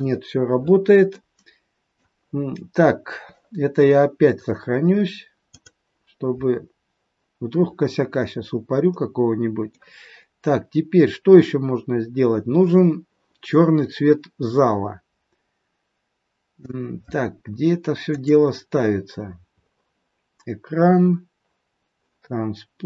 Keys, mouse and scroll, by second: 1.0 middle click, 4.4 click, 7.7 scroll down 4, 8.2 scroll up 2, 8.8 middle click, 18.1 click, 19.1-21.2 scroll up 9.